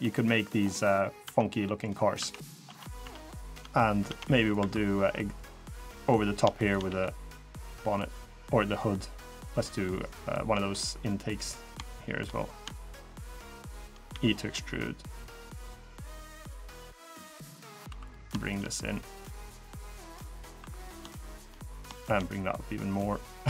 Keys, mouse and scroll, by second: 0.3-0.7 scroll down 4, 0.7 middle click, 1.0 Tab, 1.2 middle click, 1.6 scroll up 4, 1.9 Tab, 2.1 middle click, 2.8 Tab, 3.1 middle click, 3.8 Tab, 4.2 click, 4.3 3, 4.8 middle click, 6.4 shift+click, 6.6 g, 11.0 click, 12.2 click, 12.5 shift+click, 12.8 shift+click, 13.1 shift+click, 13.8 e, 16.3 click, 16.7 middle click, 17.6 2, 17.8 click, 18.2 shift+click, 18.6 click, 20.3 3, 20.7 click, 21.0 shift+click, 21.4 click, 21.7 shift+click, 22.2 click.